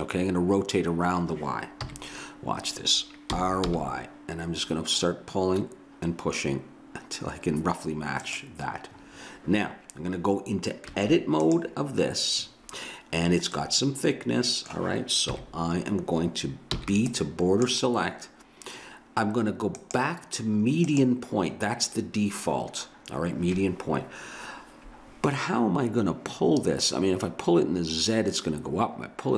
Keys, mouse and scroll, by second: 1.8 KP_1, 3.3 r, 10.9 Tab, 13.8 middle click, 15.3 KP_1, 16.8 b, 19.8-22.2 drag.